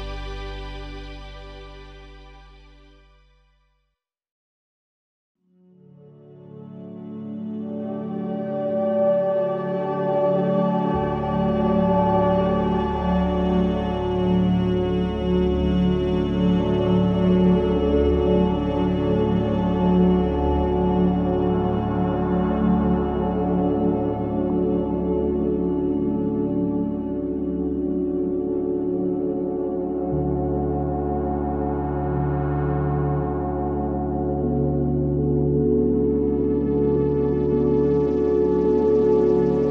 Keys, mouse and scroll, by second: 0.2 3, 0.5 click, 0.8 shift+click, 1.1 shift+click, 1.3 middle click, 1.9 shift+d, 2.6 p, 3.0 middle click, 3.5 Tab, 3.7 click, 4.0 Tab, 4.5 a, 4.8 middle click, 5.4 e, 6.7 KP_1, 7.1 scroll down 1, 7.3 Tab, 7.6 click, 7.8-8.1 scroll down 1, 8.4 shift+middle drag, 8.7-9.0 scroll down 1, 9.0 click, 9.2 Tab, 9.4-11.7 middle drag, 11.7-12.7 scroll up 1, 12.7 k, 18.9-20.0 middle drag, 20.0 c, 21.0-22.3 middle drag, 22.3 c, 23.7 middle click, 24.5 KP_1, 24.8-25.2 scroll down 1, 25.2 shift+d, 26.0 p, 26.9 Tab, 27.2 drag, 27.5 click, 27.9 Tab, 28.3 a, 29.0 Tab, 29.2 click, 29.4-29.7 middle drag, 29.7 drag, 30.0 click, 30.4 Tab, 30.8 a, 31.2 KP_1, 31.7 shift+middle click, 32.1 scroll up 1, 32.3 shift+middle click, 33.3 e, 36.8 g, 38.9-39.7 middle drag.